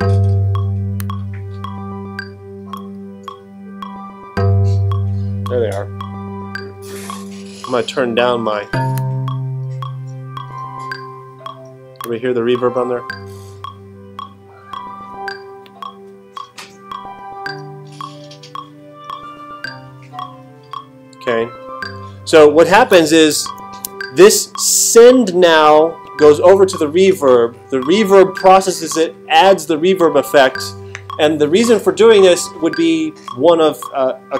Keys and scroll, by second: 23.3 alt+super+8.